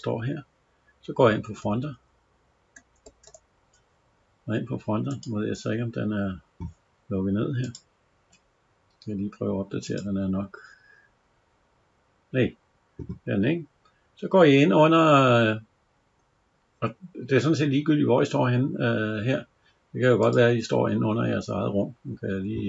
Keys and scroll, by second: 1.5 alt+Tab, 3.2 alt+Tab.